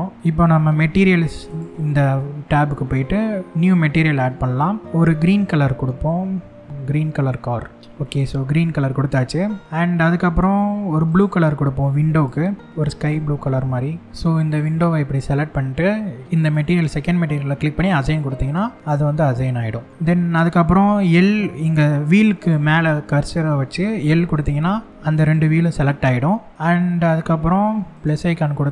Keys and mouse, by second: 1.1 click, 3.6 click, 7.7 shift+middle click, 8.6 middle click, 10.8 click, 11.9 drag, 16.0 click, 17.6 click, 18.6 middle click.